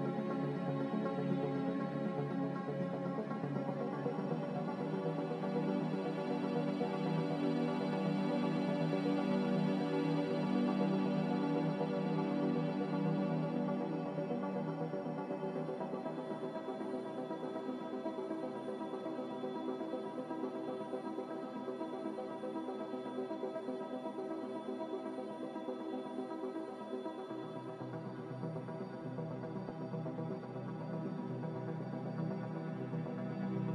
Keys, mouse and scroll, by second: 6.9 g, 13.4 middle click, 22.9 z, 25.9 ctrl+z.